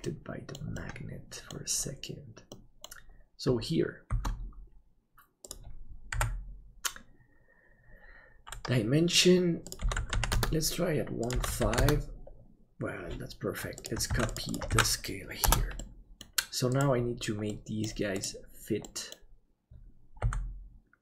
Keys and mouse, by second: 0.0 middle click, 0.8 middle click, 2.5 middle click, 4.1 shift+d, 6.1 n, 14.0 ctrl+click, 14.7-15.9 ctrl+drag, 15.9 middle click, 17.5 middle click, 18.8 middle click.